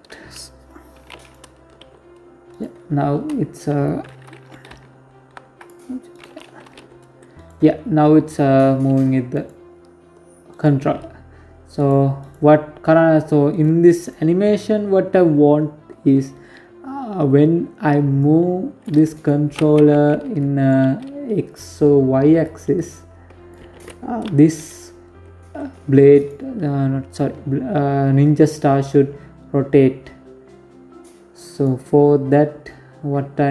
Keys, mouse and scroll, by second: 0.5 g, 1.9 scroll down 1, 2.0 scroll up 3, 3.4 ctrl+p, 4.8 right click, 5.1 scroll down 3, 5.4 g, 6.8-7.5 scroll up 3, 7.5-7.9 scroll down 3, 8.0 right click, 9.2 right click, 10.4 right click, 10.9 right click, 12.2 right click, 12.7 right click, 16.9 click, 17.8 right click, 18.6 ctrl+z, 19.3 right click, 20.2 right click, 21.1 click, 22.4 ctrl+z, 24.9 right click, 30.2 right click, 32.4 right click.